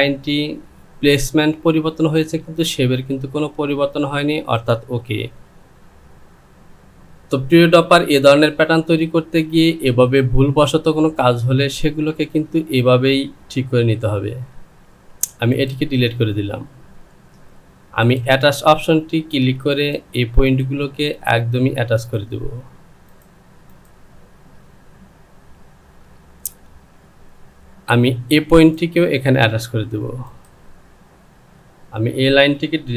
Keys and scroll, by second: 14.3 Delete.